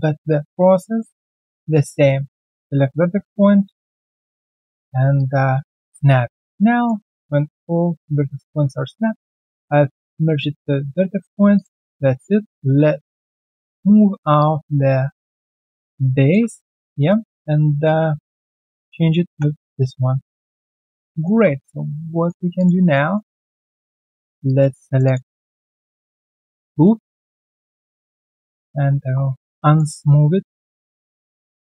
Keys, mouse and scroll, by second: 1.0 alt+click, 1.3-1.8 alt+scroll down 1, 1.8 alt+right click, 2.7 alt+r, 2.9 shift+click, 3.4 ctrl+alt+c, 3.6 q, 3.9 right click, 4.3-4.7 scroll down 1, 5.7 shift+right click, 7.0 alt+right click, 7.4 alt+middle click, 8.1 alt+right click, 8.5 alt+middle click, 8.9 alt+click, 9.3 alt+middle click, 10.0 alt+middle click, 10.3 right click, 10.8 alt+middle click, 11.2 alt+click, 11.7-12.0 scroll down 1, 12.0 alt+middle click, 13.9 alt+middle click, 14.3 alt+middle click, 15.3-17.9 typing, 16.5 alt+middle click, 16.8 alt+click, 17.6 middle click, 18.1 alt+click, 18.4 alt+right click, 18.6 alt+click, 19.8 alt+click, 20.1 alt+middle click, 20.8 alt+click, 21.1 alt+middle click, 21.6 alt+right click, 21.9 alt+click, 22.1 alt+middle click, 22.3 alt+right click, 22.5 alt+click, 22.8 alt+middle click, 23.0 alt+right click, 23.4 right click, 23.4 q, 24.4 alt+click, 24.8 shift+click, 25.0 shift+double click, 25.2 alt+scroll down 1, 25.5 alt+click, 25.7 alt+middle click, 26.0 alt+click, 26.5 alt+click, 26.8 alt+middle click, 27.8 alt+middle click, 29.4 alt+click, 29.6 alt+right click, 29.9 alt+middle click, 30.9 alt+right click, 31.2 alt+click, 31.5 alt+middle click.